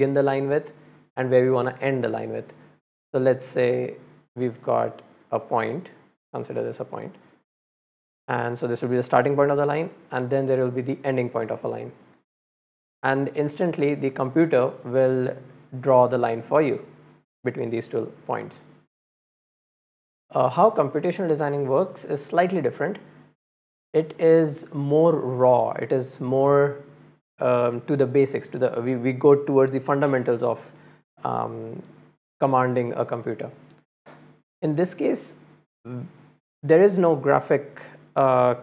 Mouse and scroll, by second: 2.8 click, 5.0-6.6 drag, 7.4 click, 10.6-11.6 drag, 11.9 click, 15.0-16.1 drag, 16.6 click, 34.2-35.3 middle drag, 35.5 middle click, 36.2 middle click.